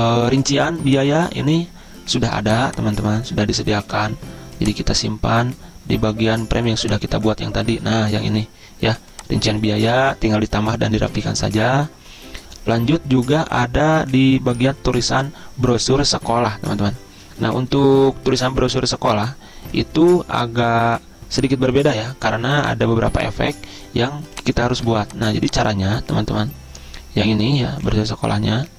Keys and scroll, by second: 4.2 ctrl+g.